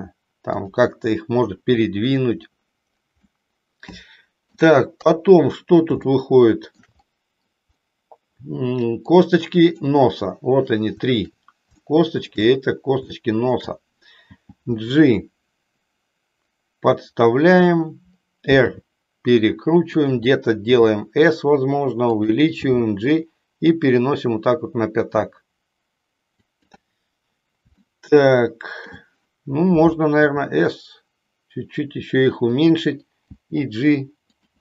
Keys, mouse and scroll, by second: 3.4-4.8 middle drag, 5.0 KP_3, 6.1 shift+middle click, 9.1 click, 11.8 shift+middle click, 13.2 shift+middle click, 14.2 g, 17.6 click, 18.6 r, 20.6 s, 22.6 g, 26.4 click, 28.0 shift+middle click, 30.1 s, 33.2 g.